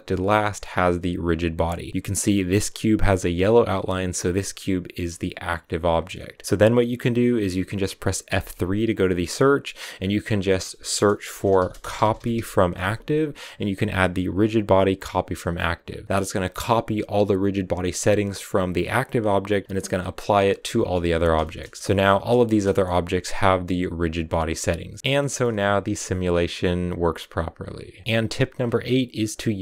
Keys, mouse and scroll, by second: 0.1-1.9 scroll up 1, 1.9-4.9 scroll up 1, 4.9-5.9 scroll up 1, 5.9-17.5 middle drag, 17.5-19.4 scroll up 1, 19.4-20.2 scroll up 1, 20.2 right click, 20.3-20.9 scroll down 5, 20.9 z, 21.0 scroll down 4, 21.2-22.4 shift+middle drag, 22.4 space, 22.6-25.2 shift+middle drag, 25.2 scroll up 1, 25.4-29.6 middle drag.